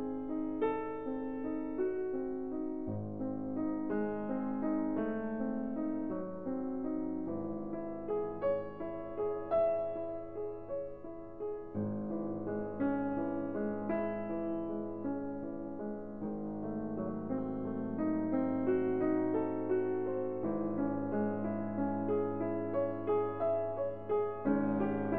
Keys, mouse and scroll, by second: 1.5 click, 3.8 click, 6.4-7.5 drag, 8.7-9.7 drag, 11.1-12.4 scroll, 12.8 right click, 14.9 click, 16.2 right click, 17.6 click, 18.9-19.9 scroll, 20.6 click, 21.9 ctrl+scroll, 24.5 click.